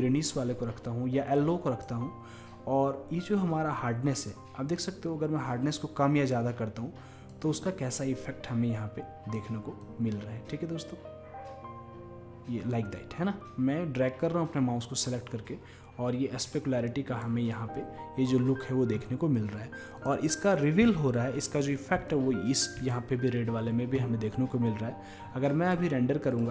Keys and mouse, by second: 3.8-5.7 drag, 7.9-9.7 drag, 9.9-11.5 drag, 20.0-21.9 drag, 22.1-26.5 drag.